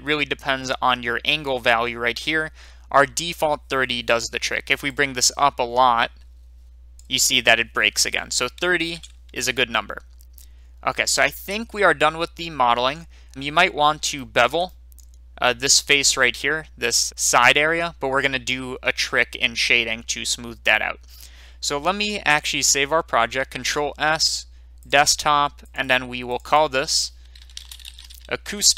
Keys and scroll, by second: 8.7 ctrl+z, 23.5 ctrl+s, 27.2-28.7 typing.